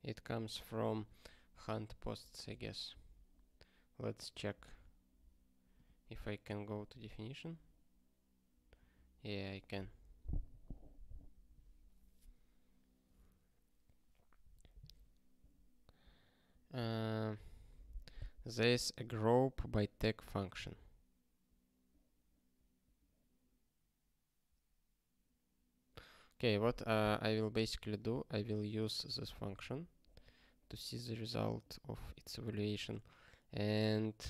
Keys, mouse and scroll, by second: 2.0 ctrl+g, 4.3 click, 5.7 click, 6.6 click, 7.2 alt+., 8.9 ctrl+n, 9.4 ctrl+p, 17.2 scroll down 1, 20.2 scroll down 1, 23.3 scroll down 1, 25.8 scroll up 10, 28.0 click, 28.1 double click, 28.8 click, 29.4 super+b, 31.4 scroll up 1, 32.6 click.